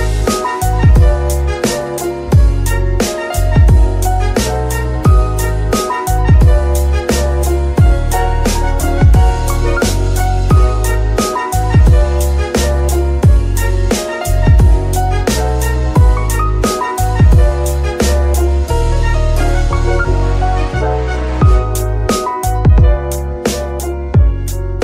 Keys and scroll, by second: 0.3 Escape, 3.4 BackSpace, 3.7 r, 4.3 Return, 7.9 g, 8.1 y, 8.6 Escape, 11.4 g, 11.6 y, 12.5 Escape, 13.6 g, 14.1 Escape, 14.8 g, 15.5 Escape, 22.7 g, 23.0 Escape, 24.6 g.